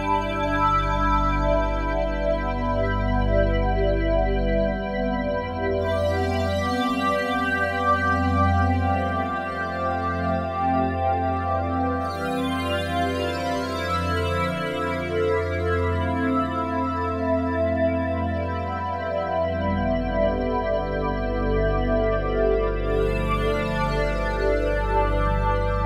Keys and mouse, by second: 0.0-1.5 drag, 1.9 click, 2.6 ctrl+alt+click, 3.0 alt+shift+click, 3.9 click, 4.8 click, 6.0-6.8 ctrl+alt+drag, 7.2 ctrl+s, 8.1 click, 8.8 click, 9.5 click, 12.5 click, 13.2 click, 14.4 click, 15.9 click, 17.7 1, 18.3 ctrl+alt+click, 19.1-20.6 alt+drag, 20.6-21.2 typing, 21.5 Escape, 22.4 a, 23.7-25.3 ctrl+alt+drag.